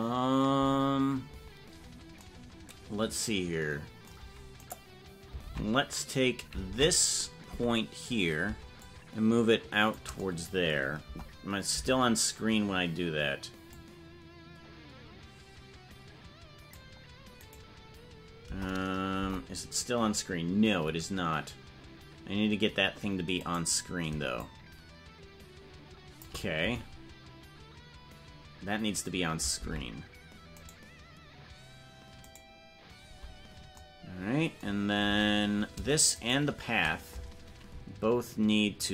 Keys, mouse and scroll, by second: 4.7 right click, 5.5 ctrl+Tab, 7.5 Tab, 8.8-9.9 shift+drag, 11.0 KP_0, 11.7 KP_0, 13.8-16.8 drag, 17.4-18.4 right drag, 18.4 KP_0, 19.2 KP_0, 22.1 scroll down 2, 23.4 right click, 24.4-26.2 shift+drag, 30.7-33.0 right drag, 33.0 Tab, 35.1 Tab, 36.3 shift+right click, 36.5 shift+right click, 38.0-38.3 scroll down 3.